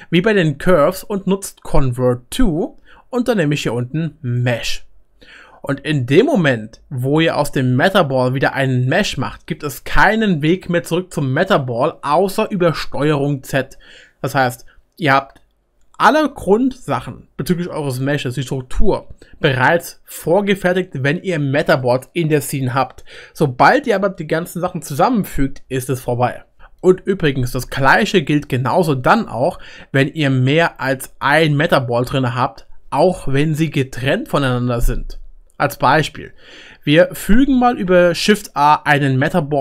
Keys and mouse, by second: 13.2 ctrl+z, 18.7 middle click, 36.7-37.3 middle drag, 37.2 click, 37.9 shift+a.